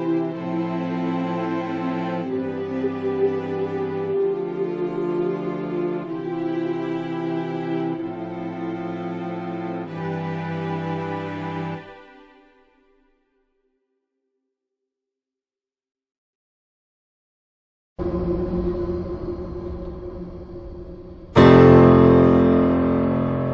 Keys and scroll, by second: 15.7 ctrl+z, 19.3-20.1 typing.